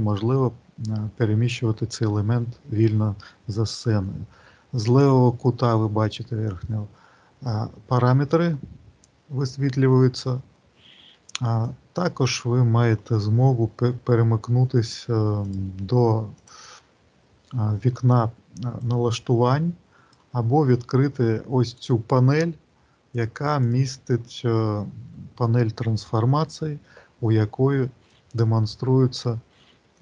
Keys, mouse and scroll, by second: 15.5 click, 16.2 click, 18.6 click, 21.7 click, 23.0 click, 28.0 click.